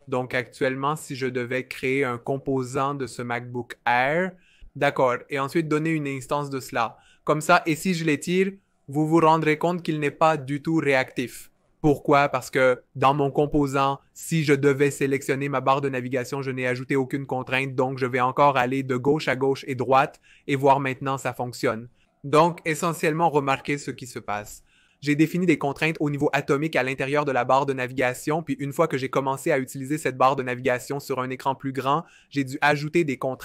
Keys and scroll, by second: 8.8 v.